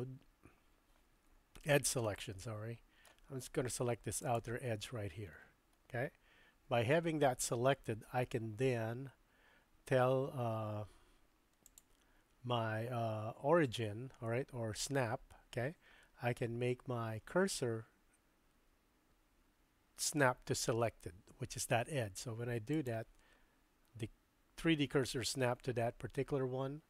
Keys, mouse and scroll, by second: 2.1 shift+middle click, 4.2 click, 11.7-22.9 drag.